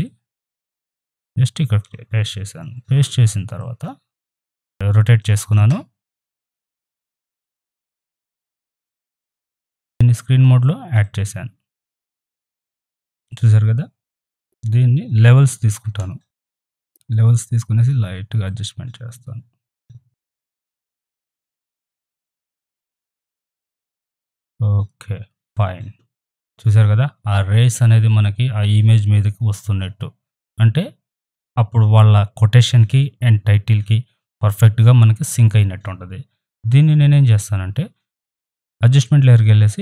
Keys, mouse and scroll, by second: 2.6 ctrl+t, 3.6-6.2 drag, 6.2 right click, 6.4 click, 6.8 ctrl+t, 7.0 click, 8.3-9.8 alt+drag, 9.9 click, 11.0-14.8 drag, 14.9 ctrl+Num_Lock, 14.9 click, 15.7 ctrl+l, 16.6-25.5 drag, 36.5 ctrl+z, 38.4-39.8 drag.